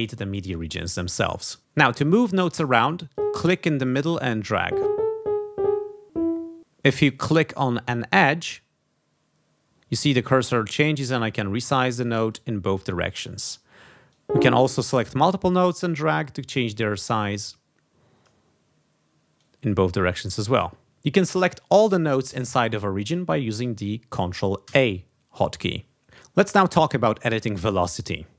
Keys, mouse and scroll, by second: 3.1 click, 4.0-6.6 drag, 8.1-11.5 drag, 12.2-13.6 drag, 14.1 click, 15.4-19.1 drag, 19.4-20.6 drag, 24.6 ctrl+a.